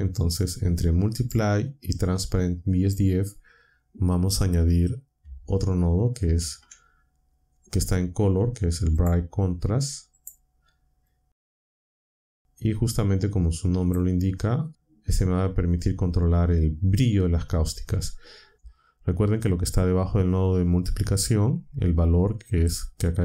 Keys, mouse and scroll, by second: 1.1 click, 2.2-3.0 drag, 6.1 shift+a, 8.9 click, 10.1 click, 11.0-12.9 drag, 21.2 click.